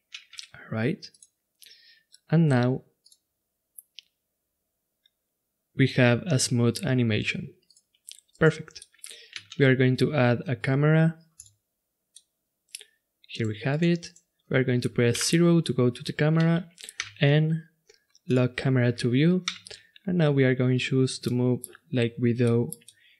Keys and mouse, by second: 1.1-2.9 drag, 3.0 click, 7.6-8.7 drag, 8.3 right click, 8.7-9.3 middle drag, 9.3 shift+a, 13.3 click, 13.7-15.1 middle drag, 15.1 KP_0, 15.3 click, 17.0 n, 18.2-19.7 drag, 19.4 n, 19.9 click, 20.0 middle click.